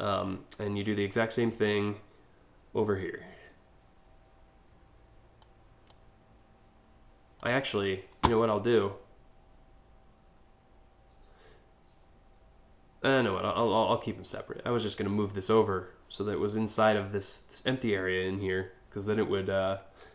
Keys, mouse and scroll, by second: 0.9-5.0 drag, 5.5-7.0 drag.